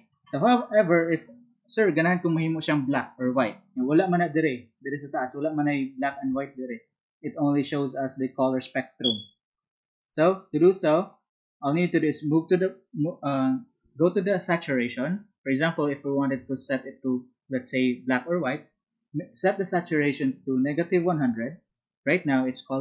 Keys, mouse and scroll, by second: 5.3-11.9 ctrl+drag, 19.5-22.0 ctrl+drag.